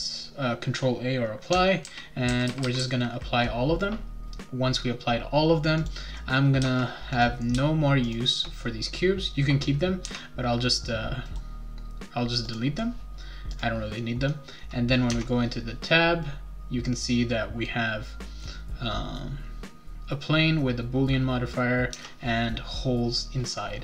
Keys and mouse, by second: 1.8 ctrl+a, 2.2 ctrl+a, 2.4 ctrl+a, 2.6 ctrl+a, 2.8 ctrl+a, 5.8 click, 7.1 click, 8.0 shift+click, 11.2 right click, 12.5 click, 13.5 click, 15.1 Tab, 21.9 Tab.